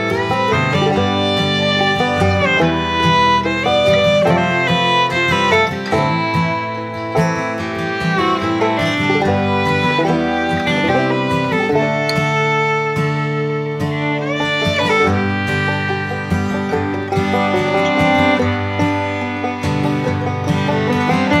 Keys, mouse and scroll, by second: 1.5 click, 7.5-14.3 drag, 14.3 right click, 15.1 click, 17.3 right click, 18.2-21.4 drag.